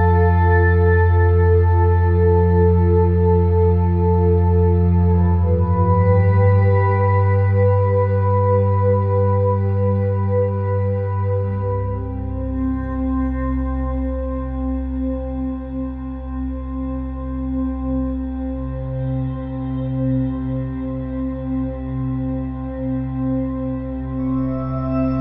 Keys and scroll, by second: 15.0 ], 18.9 [, 19.1 ], 19.7 ].